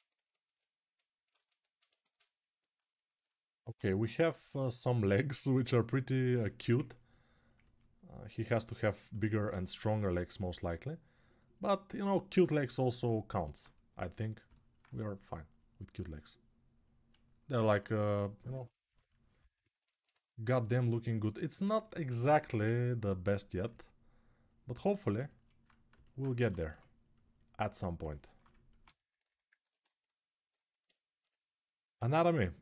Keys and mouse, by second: 1.6-2.8 ctrl+alt+drag, 1.8 ctrl+z, 2.8 middle click, 3.7-4.8 drag, 8.8-20.2 ctrl+alt+drag, 9.2 2, 20.2-23.4 alt+right drag, 23.4-32.6 alt+drag, 30.9 g.